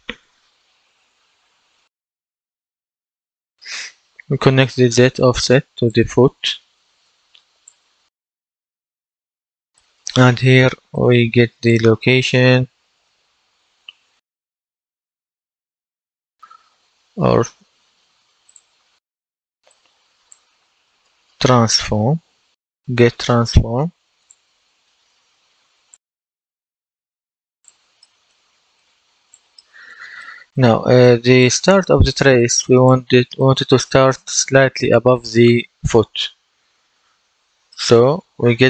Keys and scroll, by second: 1.2 F10, 11.9-13.0 typing, 14.1-15.0 typing, 20.5-22.1 typing.